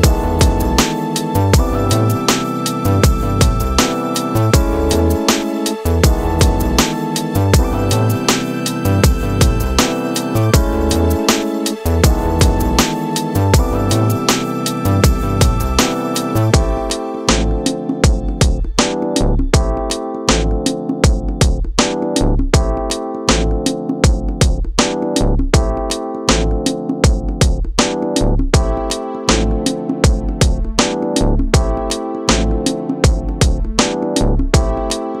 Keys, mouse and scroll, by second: 0.2-3.2 drag, 5.2-6.6 middle drag, 6.6-7.1 scroll up 2, 7.1-10.1 middle drag, 11.3-12.4 scroll up 2, 12.4-15.3 drag, 15.3-15.9 scroll down 2, 15.9-16.7 middle drag, 16.7-17.8 scroll down 1, 17.8 click, 19.5-22.9 drag, 22.9 s, 25.7 click, 27.2-29.2 scroll down 1, 29.2-34.6 drag, 34.6-35.2 scroll up 1.